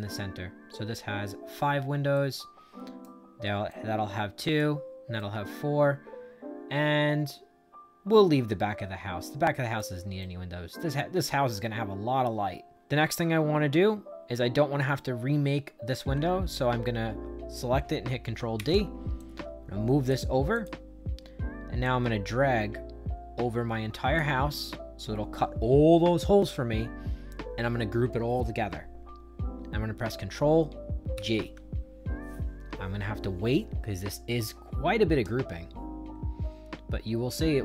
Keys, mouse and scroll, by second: 2.0 right click, 3.6 right click, 5.1-9.7 right drag, 10.1-12.7 right drag, 18.5 ctrl+d, 19.1 click, 20.4 click, 21.7-24.1 drag, 31.1 ctrl+g.